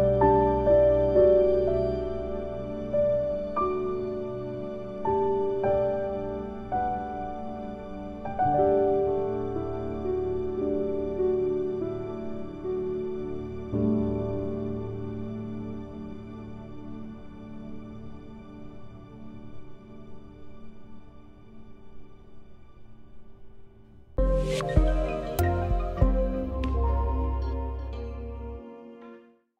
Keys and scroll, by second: 5.1 ctrl+c, 5.4 ctrl+v, 11.3 ctrl+k, 16.7 ctrl+End, 22.2 ctrl+g.